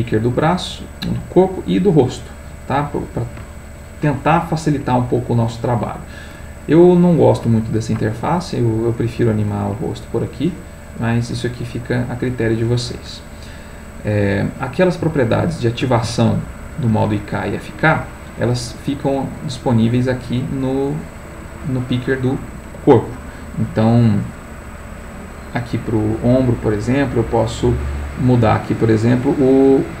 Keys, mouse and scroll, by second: 0.3 click, 10.7 click, 12.5 click, 14.4 middle click, 16.1-17.2 ctrl+shift+middle drag, 17.4 shift+middle click.